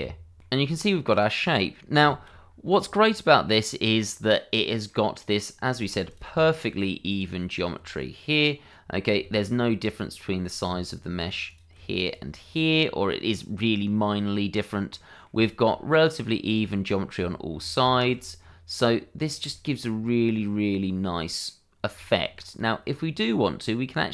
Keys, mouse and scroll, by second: 0.4 ctrl+f, 0.7 click, 0.9 Tab, 1.1 scroll down 1, 1.2 middle click, 2.1 /, 2.4-3.0 scroll down 1, 3.0 click, 3.9 /, 4.5 scroll up 1, 4.7 click, 4.8 middle click, 5.1 shift+middle click, 5.3 scroll up 1, 5.5 middle click, 6.8 scroll up 1, 7.0 click, 7.1 Tab, 8.1-8.5 scroll up 1, 8.5 middle click, 9.7 shift+middle click, 9.8 click, 12.0 shift+click, 12.4 scroll down 1, 12.7 middle click, 13.3 scroll up 1, 14.6 scroll down 1, 14.9 middle click, 15.5 shift+middle click, 15.7-16.1 scroll up 1, 16.1 middle click, 17.2 Tab, 17.8 shift+middle click, 18.4 middle click, 19.1 scroll down 1, 19.5 shift+middle click, 20.1 middle click, 21.7 scroll down 1, 22.0 shift+middle click, 22.4-23.7 scroll up 1, 23.7 middle click.